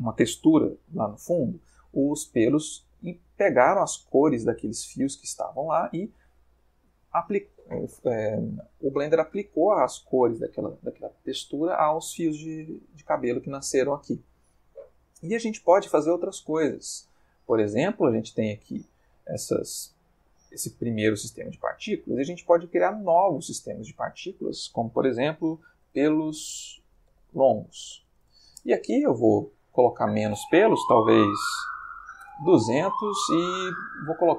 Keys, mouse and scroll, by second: 13.7-14.4 ctrl+middle drag, 17.4 click, 19.6-20.3 ctrl+middle drag, 20.8 middle click, 22.6 click, 23.7 click, 25.5-27.9 typing, 28.2 shift+Return, 29.9 click, 31.7 2, 31.8 0, 32.2 Return.